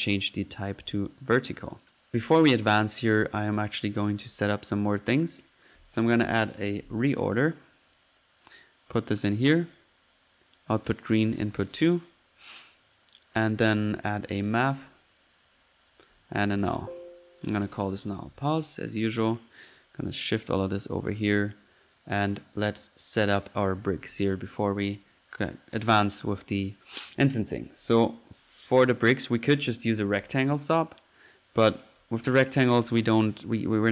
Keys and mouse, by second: 0.3 click, 0.8-1.2 drag, 2.8 middle click, 3.2 click, 3.4 click, 4.3-4.7 drag, 5.1 right click, 6.1-6.8 typing, 7.5-7.9 drag, 8.0 click, 9.2 drag, 9.5 click, 10.9 click, 11.4 click, 12.1-12.5 drag, 14.1-14.6 right drag, 14.2-14.9 typing, 16.0 click, 16.7 alt+n, 17.1-17.8 alt+drag, 17.8 alt+n, 19.0 middle click, 19.5 right click, 20.0-20.4 right drag, 20.4 click, 21.0-21.5 middle drag, 24.1-24.4 drag, 24.6 click, 27.5 middle click, 27.8 click, 29.5 click, 29.7-30.6 typing, 30.6 drag, 31.7 click, 32.1-33.4 drag.